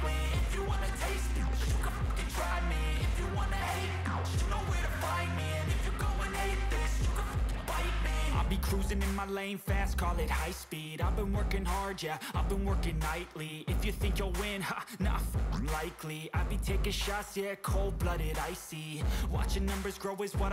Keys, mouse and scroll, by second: 0.0 right drag, 0.3 middle click, 5.4 middle click, 5.6-6.6 right drag, 6.6-9.0 middle drag, 11.3-12.3 alt+middle drag, 12.3 right click, 12.6 middle click, 17.8-18.3 drag.